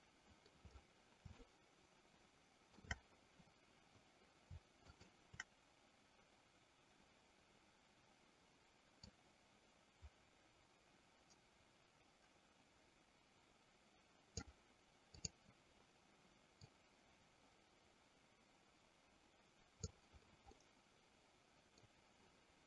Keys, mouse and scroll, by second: 1.6-3.1 shift+middle drag, 4.9 shift+click, 9.4-14.7 drag, 15.3 click, 16.9-20.2 drag, 20.8-22.1 middle drag.